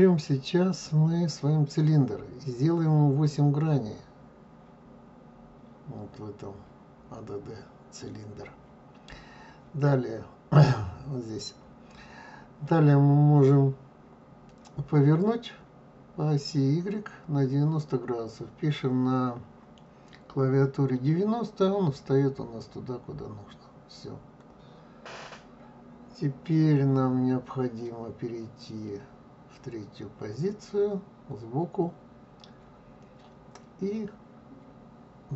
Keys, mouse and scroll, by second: 5.0-8.0 middle drag.